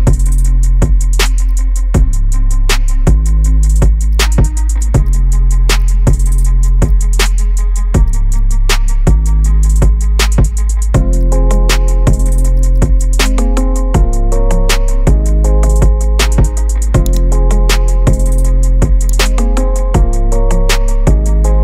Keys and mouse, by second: 0.0 KP_3, 0.2 KP_1, 0.3 g, 1.9 g, 3.3 g, 4.5 click, 5.3 g, 6.0 click, 6.3 ctrl+click, 7.0 g, 7.3 click, 8.6 KP_1, 8.7 g, 11.8 g, 13.6 g, 14.7 Tab, 15.7-16.2 middle drag, 17.1 click, 18.2 middle click, 19.2-21.3 drag.